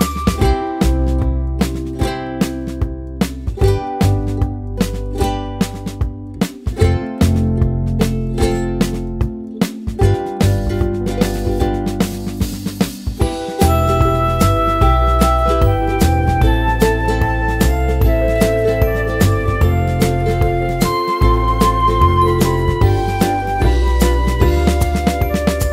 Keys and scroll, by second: 4.8-8.0 typing, 8.5 Return.